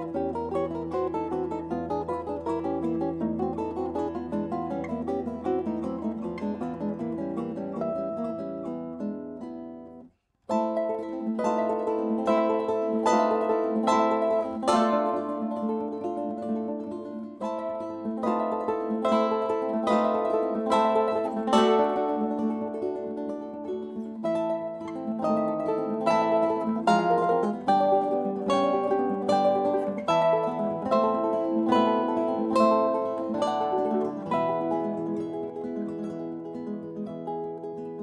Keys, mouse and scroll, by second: 0.3 a, 1.5 c, 7.6 s, 14.2-16.4 middle drag, 28.2 Tab, 29.1 Tab, 30.6 a, 33.1 KP_5, 33.7 KP_1, 34.9 KP_3, 35.3 KP_5.